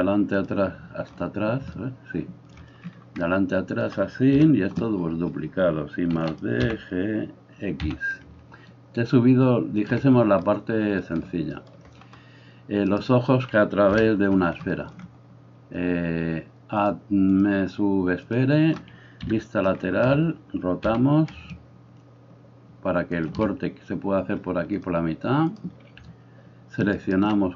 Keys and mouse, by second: 4.4 KP_1, 6.2 shift+d, 6.6 g, 8.2-12.9 ctrl+middle drag, 12.9-13.9 right drag, 13.9-16.9 middle drag, 13.9 KP_1, 16.9-23.2 drag, 19.3 KP_3, 20.9 r, 23.2-24.8 middle drag, 24.8-27.5 drag, 27.0 alt+middle click, 27.0 alt+right click.